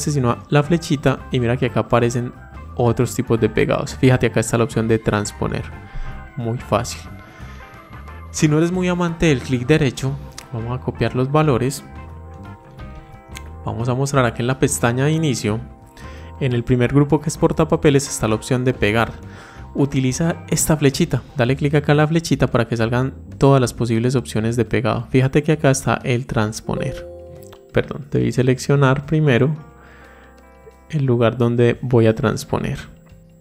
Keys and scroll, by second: 12.5 ctrl+c.